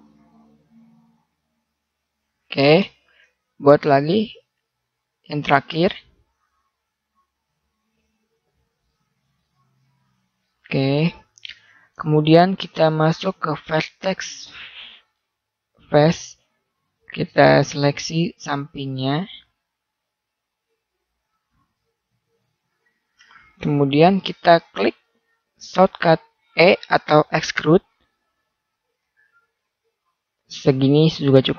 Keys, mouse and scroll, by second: 3.0 ctrl+r, 5.9 middle click, 12.6-14.6 drag, 15.2-16.7 middle drag, 17.9-19.2 right drag, 24.5-25.9 middle drag, 29.0 e.